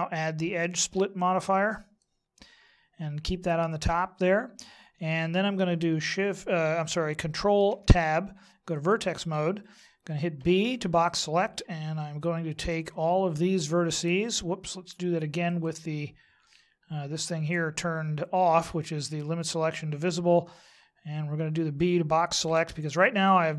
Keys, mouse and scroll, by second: 2.0 click, 7.7 ctrl+Tab, 10.4 b, 15.4 click, 22.4 b.